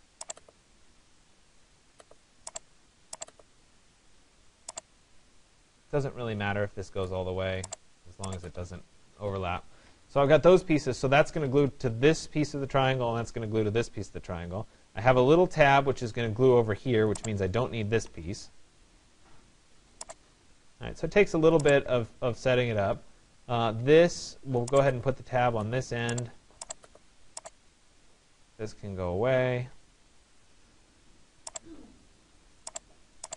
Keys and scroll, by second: 9.5 Escape, 17.7 Delete, 29.4 Delete.